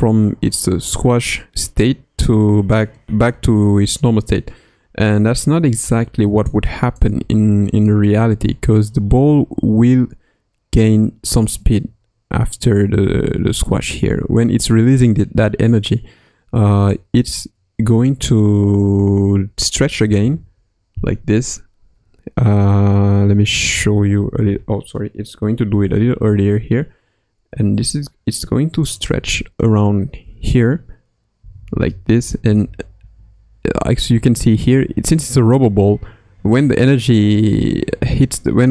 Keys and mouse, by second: 6.9-16.9 drag, 18.9 Right, 20.0 Left, 20.4 Right, 23.8 Left, 25.7 s, 30.2 i, 31.4 Left, 31.7 Left, 31.8 Left, 32.4 Left, 33.0 Right.